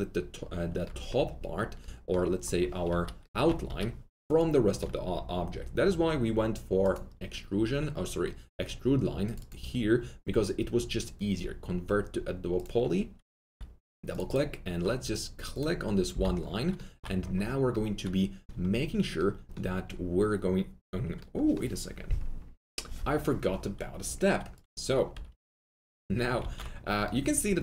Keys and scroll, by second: 2.9 F3, 3.6 alt+F3, 13.4 2, 16.0 g, 25.0 3, 26.4 alt+q.